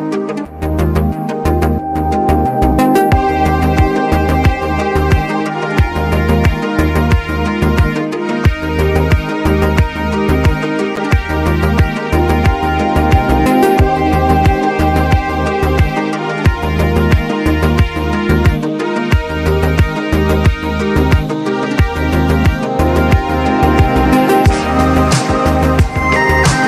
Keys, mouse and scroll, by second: 0.4 click, 1.0 3, 1.6 7, 2.1 click, 3.2-4.4 typing, 4.8-11.7 drag, 11.4-12.8 typing, 12.7 click, 17.0 click, 17.6-18.0 typing, 18.5 click, 21.9 click, 22.5-23.5 typing, 23.6 click, 25.3 click, 25.8-26.6 typing.